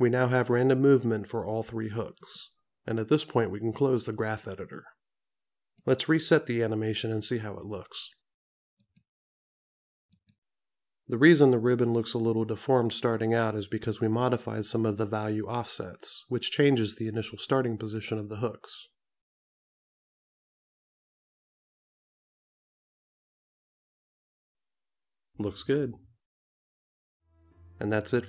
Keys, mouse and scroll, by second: 4.5 click.